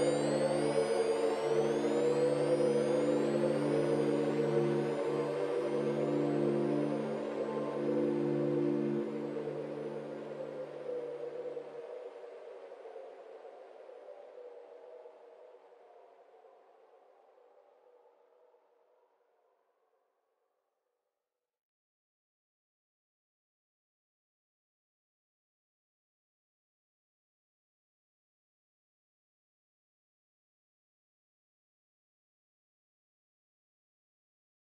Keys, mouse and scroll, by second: 0.3-2.0 scroll up 3, 2.0-2.5 drag, 2.7-4.6 middle drag, 4.6 click, 5.0-5.3 scroll down 3, 5.9 click, 6.7 click, 9.7-12.7 drag, 12.8 click, 18.4 click, 19.2-19.6 scroll up 1, 19.6 scroll down 3, 19.7-22.8 middle drag, 23.1 scroll down 3, 23.3-24.6 middle drag, 24.6-25.7 scroll up 2, 25.7 ctrl+alt+KP_0, 26.5-27.5 scroll down 1, 27.5 click, 28.7-29.4 middle drag, 29.4-30.4 scroll down 2, 30.4 ctrl+alt+KP_0, 31.2-32.2 scroll up 5, 32.9 g.